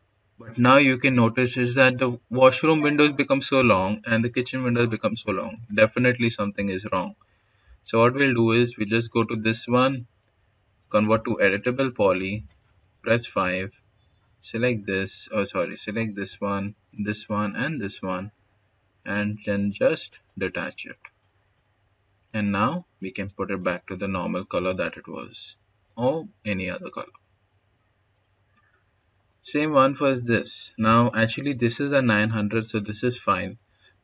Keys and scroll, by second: 10.7-11.7 typing, 12.8 5.